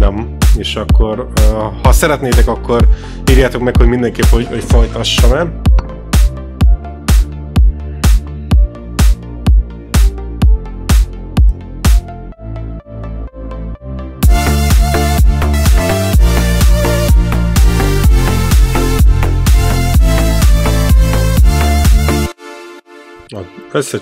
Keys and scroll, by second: 22.2 space.